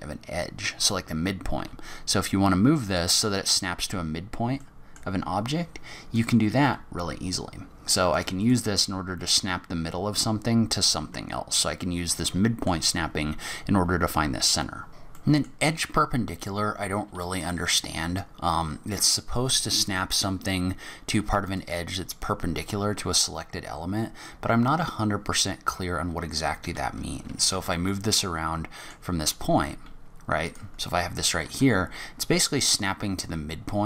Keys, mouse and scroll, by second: 1.5 g, 3.7-4.5 scroll down 4, 4.6 middle click, 6.1 click, 6.6 g, 8.4 scroll down 1, 8.5 middle click, 10.6-11.1 scroll up 1, 11.1 scroll down 1, 11.2 scroll down 3, 11.5 middle click, 14.9 middle click, 15.2 middle click, 17.4 click, 21.5 click, 22.6 g, 27.9 middle click, 29.2 g, 30.8 scroll down 3, 31.0-31.5 scroll up 2, 31.5 g.